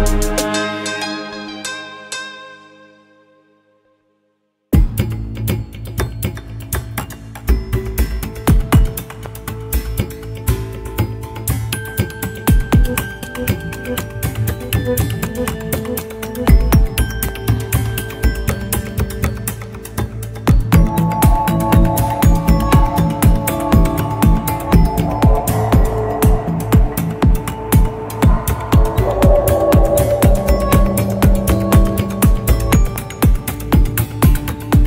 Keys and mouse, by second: 0.2-4.2 drag, 32.5 KP_Decimal, 34.1-34.8 middle drag.